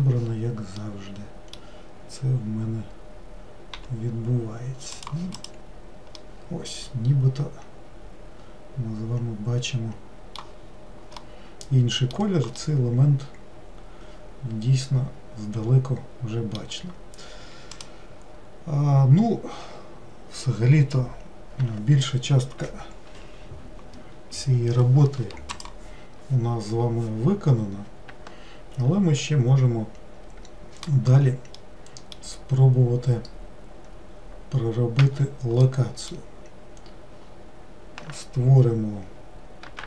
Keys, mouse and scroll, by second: 0.9-3.9 middle drag, 3.9 g, 5.5 click, 6.3-9.3 middle drag, 10.7-11.4 scroll down 2, 11.4-15.9 middle drag, 31.7-34.9 middle drag, 35.1 Tab, 35.7-37.3 middle drag, 37.3 scroll down 2, 39.7 scroll down 1.